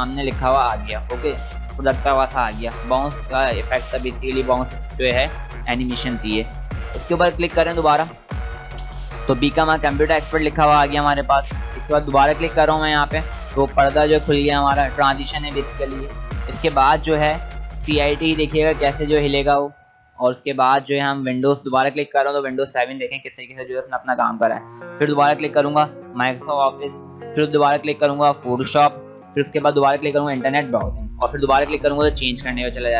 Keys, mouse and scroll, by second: 7.4 click, 12.2 click, 19.4 click, 22.2 click, 25.6 click.